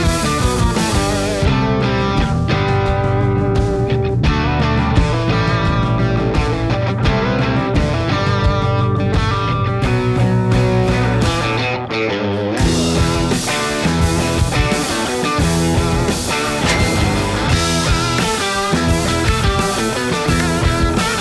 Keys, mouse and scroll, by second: 0.0 Right, 0.5 Right, 1.3 1, 1.7 Return, 3.7 click, 3.9-4.6 typing, 5.5 click, 10.3 space.